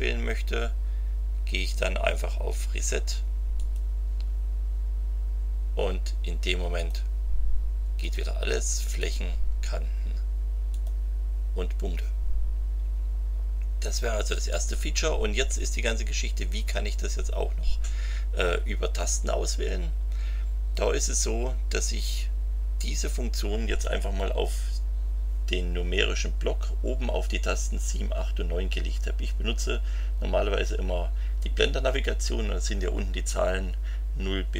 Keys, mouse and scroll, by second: 3.5 click, 6.7 click, 8.0 click, 8.9 click, 10.7 click.